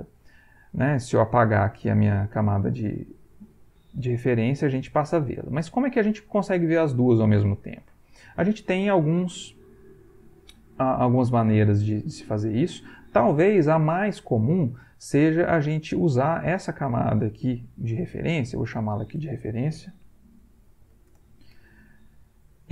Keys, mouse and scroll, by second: 1.1 click, 2.4 click, 5.0 click, 5.5 click, 16.0 click, 18.5 click, 19.5-21.4 typing.